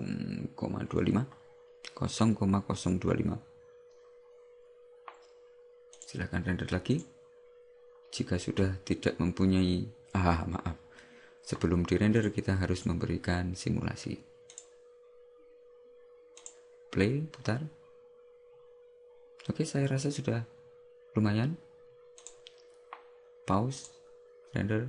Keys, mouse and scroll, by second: 6.0 click, 7.0 click, 12.9 click, 22.4 click.